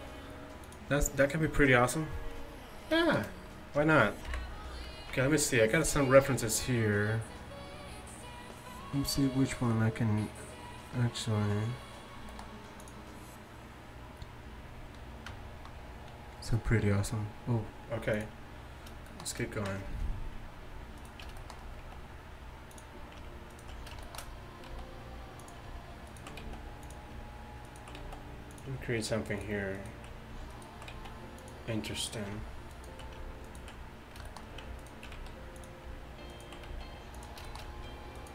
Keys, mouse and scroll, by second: 2.7-4.3 middle drag, 4.3 KP_1, 18.5-21.0 middle drag, 21.0 right click, 21.5 middle click, 21.9 s, 24.7 s, 26.5 s, 28.1 s, 31.0 s, 35.2 s, 36.7 s.